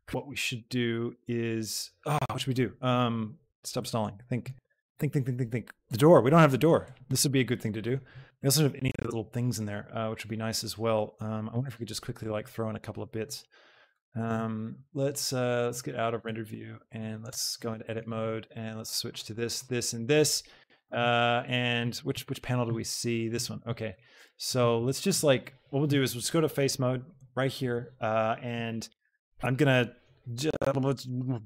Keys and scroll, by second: 17.2 Tab, 22.0 shift+KP_0.